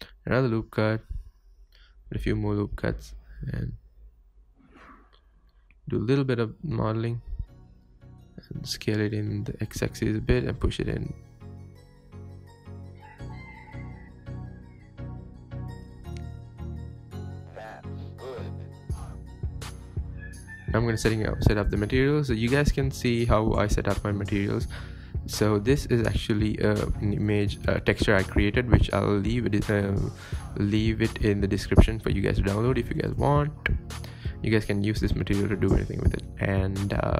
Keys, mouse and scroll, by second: 0.6 ctrl+r, 1.5 s, 2.6 ctrl+r, 3.5 s, 4.5 ctrl+r, 5.5 s, 6.4 Tab, 6.5-6.8 scroll down 2, 6.8 scroll up 1, 7.0 scroll down 1, 7.2-8.0 middle drag, 8.0 Tab, 8.4 a, 9.0 scroll up 1, 9.2-9.7 shift+middle drag, 9.7 s, 11.6 s, 12.8 g, 13.3 g, 14.4 Tab, 14.5 scroll down 3, 14.7-15.4 middle drag, 15.4 click, 15.6 click, 15.8 scroll up 1, 15.9 scroll down 4, 16.1-16.7 middle drag, 16.7 scroll up 1, 16.9-20.1 shift+middle drag, 20.1 click, 20.3-20.7 scroll up 1, 20.7 click, 21.4 click, 21.7 ctrl+t, 26.4-26.7 drag, 27.0-29.0 scroll up 3, 29.4-32.9 drag, 33.8 click, 33.9-35.7 middle drag, 35.7 click, 36.3-37.1 scroll up 4.